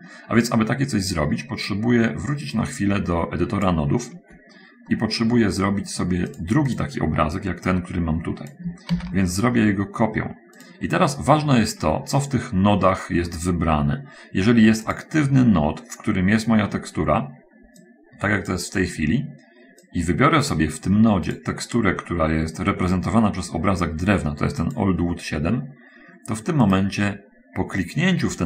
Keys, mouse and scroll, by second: 0.9-1.4 scroll up 1, 2.8-4.3 drag, 5.3 middle click, 5.8 scroll up 1, 6.7 click, 7.1 click, 7.5-8.7 drag, 8.9 shift+d, 11.0 click, 14.9 click, 17.9-19.1 drag, 20.3 click, 21.7 click, 25.1 click, 26.8 click.